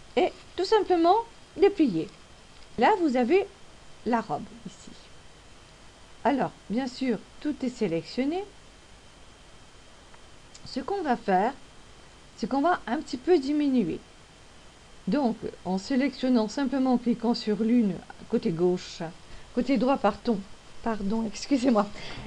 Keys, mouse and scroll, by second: 5.5-5.9 scroll up 1, 6.2-7.5 scroll up 1, 8.8 click, 17.9 click, 18.7 right click.